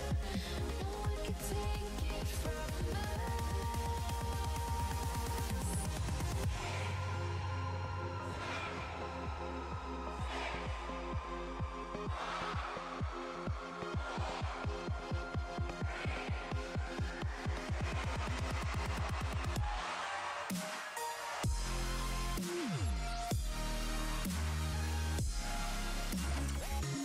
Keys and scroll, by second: 13.0 s, 14.4 s, 20.0 s, 20.5 s, 22.4 s.